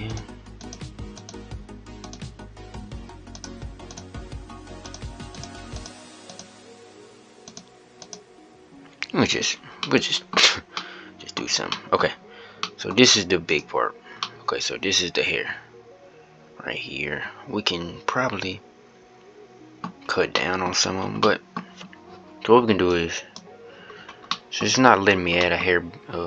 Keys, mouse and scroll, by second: 8.9-9.5 scroll up 1, 9.5-10.3 middle drag, 10.3 scroll up 1, 10.5-11.2 middle drag, 11.2-12.1 scroll up 1, 12.1-13.4 middle drag, 13.4 click, 13.9-19.6 middle drag, 19.6-20.1 scroll up 1, 20.1 middle click, 20.6-20.9 scroll down 2, 20.9-21.6 scroll up 1, 21.6 scroll up 1, 21.8-26.2 middle drag.